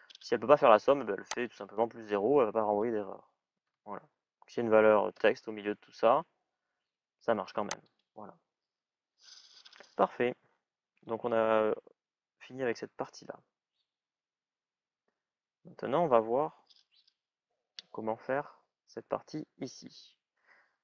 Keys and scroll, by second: 4.9 Return.